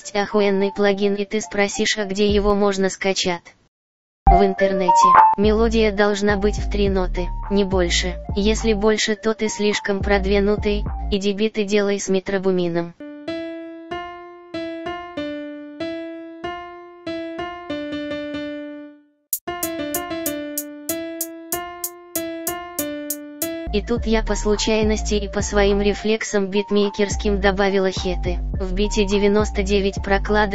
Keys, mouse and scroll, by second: 12.2 click.